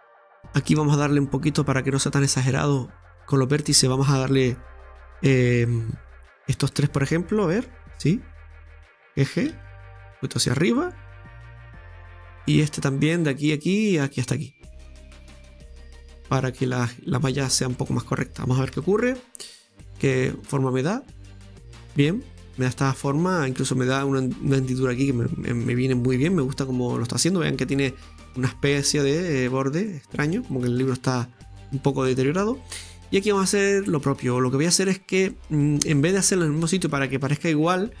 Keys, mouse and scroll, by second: 1.0 click, 1.5-1.8 scroll up 2, 3.1 click, 4.0 right click, 6.4 shift+right click, 6.7-8.4 middle drag, 8.4 shift+right click, 9.4 g, 10.8-12.5 middle drag, 12.5 right click, 13.2 shift+right click, 13.5-14.7 middle drag, 14.7 shift+right click, 15.6 g, 16.9 middle click, 17.4-17.8 scroll down 2, 17.8 scroll up 1, 17.9 middle click, 18.8 Tab, 19.0-20.4 scroll down 2, 20.4 scroll down 2, 20.4 click, 20.9-21.9 middle drag, 21.9-25.0 scroll up 2, 25.6 scroll down 1, 25.7-29.8 middle drag, 30.5 middle click, 30.8 scroll up 1, 31.4-31.9 scroll up 2, 31.8 middle click, 32.2-32.6 scroll down 3, 32.6 middle click, 33.3 Tab, 33.6 scroll up 1, 34.2-38.0 middle drag, 34.2-34.9 scroll up 1.